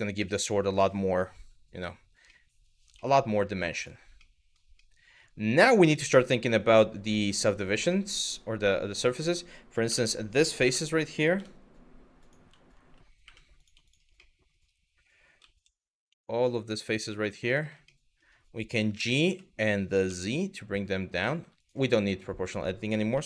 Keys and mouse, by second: 0.0-0.5 middle drag, 1.9-2.3 middle drag, 2.7 shift+middle click, 3.4 click, 3.9-4.2 middle drag, 4.5-4.9 middle drag, 5.4-7.1 middle drag, 7.5 middle click, 9.5 1, 10.3 3, 11.0 Tab, 12.9 3, 13.2 click, 13.5 shift+click, 13.8 middle click, 15.0 z, 16.5 click, 17.6 middle click, 18.4 g, 18.9 y, 22.0 click.